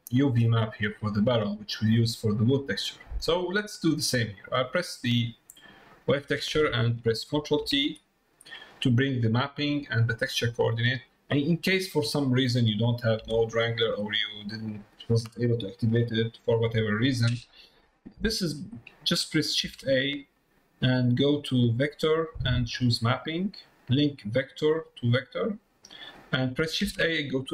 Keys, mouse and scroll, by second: 1.3 Tab, 1.7 middle click, 2.7 middle click, 3.3 middle click, 4.7-6.1 drag, 8.9 click, 10.8 middle click, 11.3 click, 14.0 click, 17.2 middle click, 17.9 middle click, 18.7 click, 24.5-25.5 drag.